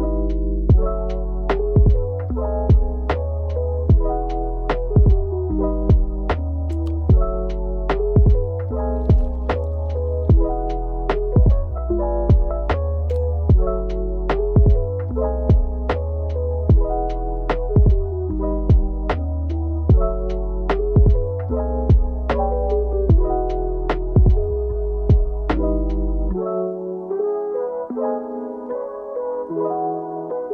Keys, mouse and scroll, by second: 0.1 middle click, 0.4 Tab, 0.6 middle click, 1.1 scroll up 1, 1.2 click, 1.3 middle click, 1.8 click, 2.7 middle click, 2.8 click, 3.2 ctrl+z, 3.2 scroll up 2, 3.4 click, 3.6 middle click, 4.1 middle click, 5.4 middle click, 5.5 click, 5.6 middle click, 5.9 middle click, 6.1 middle click, 6.5 alt+shift+click, 6.6 middle click, 6.6 scroll up 4, 7.1 Delete, 7.2 middle click, 7.3 click, 7.4 ctrl+z, 7.6 shift+click, 7.8 middle click, 8.0 click, 8.1 click, 8.2 middle click, 8.4 shift+click, 8.5-9.1 scroll down 2, 9.6 Tab, 10.2 middle click, 10.3 scroll up 4, 10.5 click, 10.6 KP_1, 10.6 ctrl+KP_Add, 10.9 scroll down 7, 11.1 scroll up 1, 12.9 click, 13.4 click, 13.6 click, 14.1 click, 14.3-14.7 scroll down 3, 14.7 click, 15.4 ctrl+KP_Add, 15.6 click, 15.7 middle click, 15.8 scroll up 3, 16.1 shift+click, 17.2 click, 17.6 middle click, 17.7-18.4 scroll up 4, 17.9 Tab, 18.4 click, 19.0 Tab, 19.1 KP_1, 19.6 ctrl+KP_Add, 19.8 Tab, 19.9 middle click, 20.0 scroll up 3, 20.1 Tab, 20.3 ctrl+z, 20.5 click, 20.7 ctrl+KP_Add, 20.9 click, 20.9 middle click, 21.0 Tab, 21.1 ctrl+KP_Add, 21.1 click, 21.2 middle click, 21.5 Tab, 21.6 ctrl+KP_Add, 21.7 click, 21.8 ctrl+z, 21.9 Tab, 22.4 scroll up 4, 22.6 scroll down 9, 22.6 middle click, 22.9 KP_1, 23.2 alt+Left, 23.2 ctrl+KP_Add, 23.4 ctrl+z, 23.9 middle click, 24.0 shift+Left, 24.1 middle click, 24.2 shift+Left, 24.3 KP_1, 24.4 scroll up 1, 24.5 Delete, 24.6 scroll down 4, 24.7 scroll up 3, 24.8 alt+click, 24.8 ctrl+KP_Add, 25.1 Tab, 25.4 shift+middle click, 25.5 alt+click, 25.7 ctrl+KP_Add, 25.9 Delete, 25.9 Tab, 26.4 ctrl+KP_Add, 26.5 Delete, 26.6 Tab, 26.6 scroll up 3, 26.7 Tab, 26.9 Delete, 27.2 Delete, 27.3 Tab, 27.6 ctrl+KP_Add, 27.7 Tab, 27.9 scroll up 5, 28.0 ctrl+KP_Add, 28.1 Tab, 28.3 middle click, 28.5 click, 30.3 Tab, 30.3 a, 30.4 click.